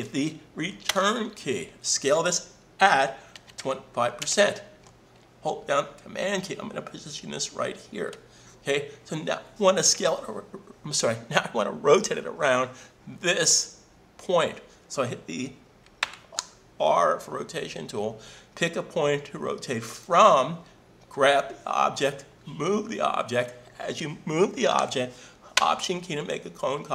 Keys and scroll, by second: 0.9 Return, 3.9-4.6 typing.